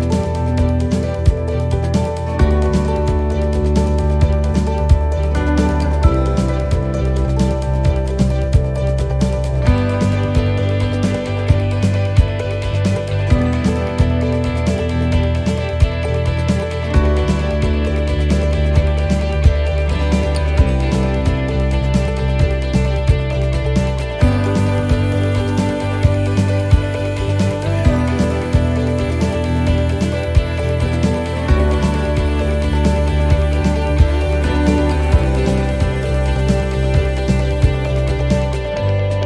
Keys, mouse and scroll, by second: 0.0 click, 1.4 right click, 1.8 shift+right click, 3.1 click, 5.0 right click, 5.7 click, 12.1 click, 18.1 middle click, 18.5-18.8 scroll down 2, 18.9 shift+middle click, 19.5-19.9 scroll up 2, 20.0 shift+middle click, 20.5 scroll down 1, 21.4-21.8 scroll up 1, 22.4 right click, 23.7 l, 24.5 click, 25.4 click, 28.0 middle click, 30.3 g, 34.6 click, 36.7 middle click, 37.0-37.6 scroll down 2, 37.6 scroll down 1, 37.9 shift+middle click, 38.3-38.9 scroll up 1, 38.9 middle click.